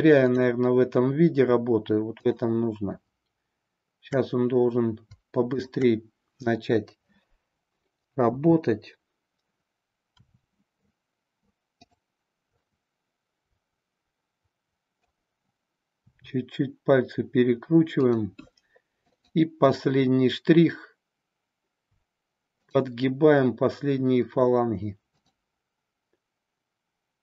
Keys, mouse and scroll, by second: 0.2 click, 5.5-7.7 shift+drag, 8.3 KP_7, 10.1 r, 12.5-15.0 middle drag, 16.0 r, 19.0-21.4 drag.